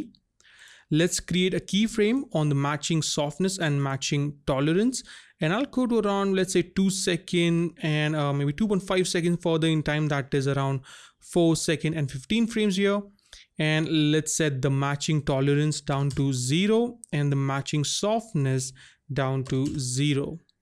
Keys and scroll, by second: 16.0 KP_0, 16.1 Return, 19.5 KP_0, 19.7 Return.